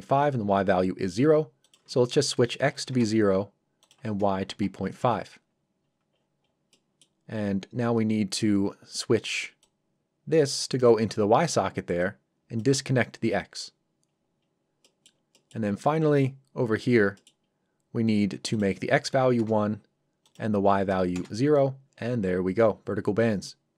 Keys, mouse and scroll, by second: 1.6 click, 2.6 KP_0, 2.9 Return, 3.8 click, 4.6 KP_5, 5.0 Return, 5.8 scroll down 1, 6.7 middle click, 7.4-8.5 scroll up 1, 9.6 click, 14.1 scroll down 1, 14.8 middle click, 16.3 scroll up 1, 17.2 middle click, 17.4-18.5 scroll up 1, 18.5 click, 19.1 KP_1, 19.4 Return, 20.3 click, 20.9 KP_0, 21.1 Return.